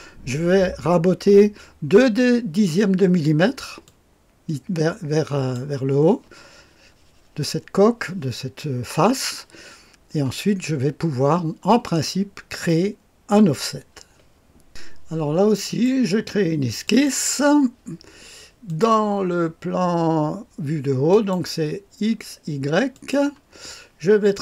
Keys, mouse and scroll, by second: 3.8-5.5 drag, 11.1-12.1 scroll down 1, 12.1-12.6 scroll down 1, 12.6-14.0 middle drag, 14.6 click, 15.6 click, 16.8 click, 18.6 click, 21.0 click, 22.9 click.